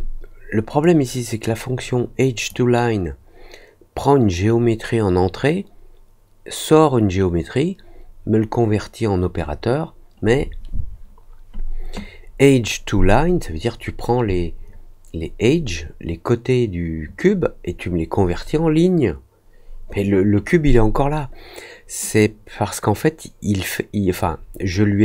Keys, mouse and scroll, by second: 0.8-2.4 drag.